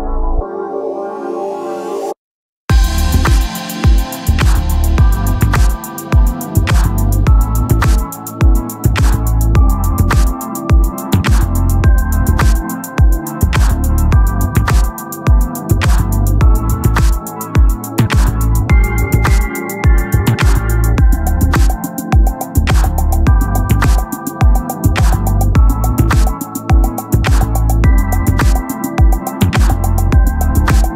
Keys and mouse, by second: 5.3 click, 15.0 click, 21.7 click, 26.3 click.